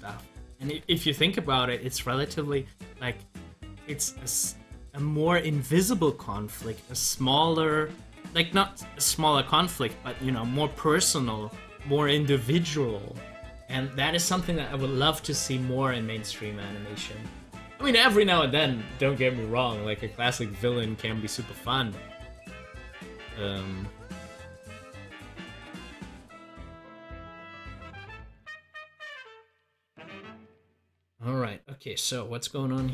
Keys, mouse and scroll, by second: 0.7 ctrl+v, 20.3 ctrl+v, 20.4 scroll up 1, 25.1 scroll down 1, 26.6 click, 29.6 scroll up 1.